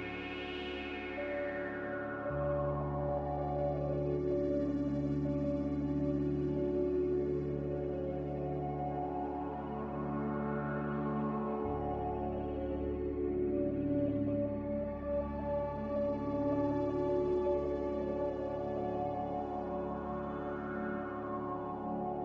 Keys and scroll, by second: 2.8 z, 6.3 typing, 6.8 Return, 7.7-8.5 typing, 13.3 m, 14.8 Escape, 15.3 b.